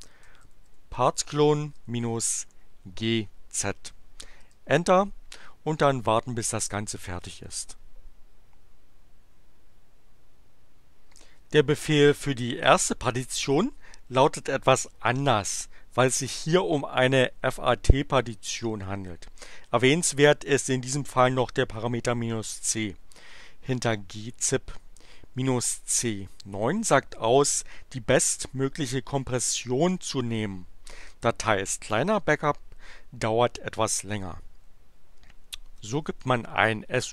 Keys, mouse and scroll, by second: 0.0-2.9 typing, 4.4 Return, 35.5-37.1 typing.